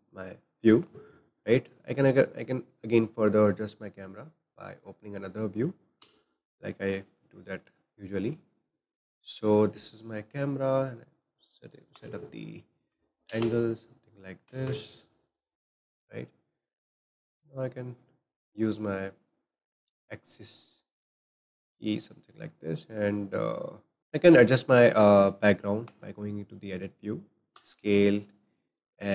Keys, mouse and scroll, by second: 2.0-2.3 middle drag, 2.3-2.8 scroll down 5, 4.3-5.7 drag, 6.0 KP_0, 8.9 click, 11.9-14.7 drag, 16.6 click, 17.4-19.1 drag, 24.0 ctrl+z, 24.0-24.5 scroll down 1, 24.5 scroll up 2, 25.9 Tab, 27.6 s.